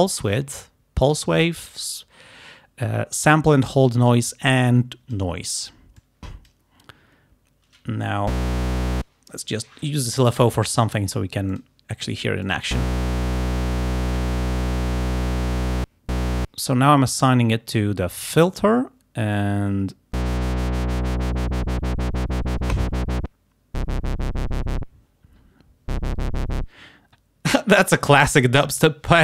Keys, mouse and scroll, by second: 1.5-5.4 drag, 6.0 click, 11.6 scroll, 12.5-12.8 scroll, 14.4-15.9 drag, 19.4-22.8 drag.